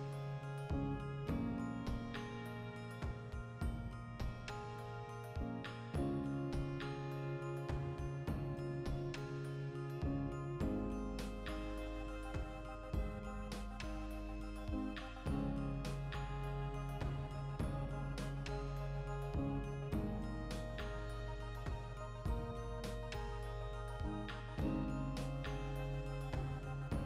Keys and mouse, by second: 0.5 click, 2.7 g, 3.0 click, 3.2 right click, 3.5 ctrl+middle click, 4.1 click, 5.1-7.6 ctrl+middle drag, 6.2 alt+q, 7.6-9.7 drag, 9.3 e, 9.9 shift+Tab, 10.2 g, 10.5 click, 10.6 middle click, 11.4 alt+q, 11.8-14.3 ctrl+shift+middle drag, 14.0 g, 14.3 click, 14.5-15.9 shift+middle drag, 15.7 Tab, 15.9 right click, 16.1 Tab, 16.5 shift+middle click, 17.4 click, 17.7 shift+middle click, 18.1 3, 18.4-19.6 alt+right drag, 19.6 ctrl+KP_Add, 19.9 ctrl+KP_Subtract, 20.8 x, 21.4 alt+right click, 21.9 2, 22.1 alt+right click, 22.4 KP_Decimal, 22.5-25.4 middle drag, 23.4 ctrl+f, 24.6 ctrl+r, 25.4 click, 25.5-26.6 ctrl+middle drag, 25.9 alt+q, 26.6 right click, 26.9 l.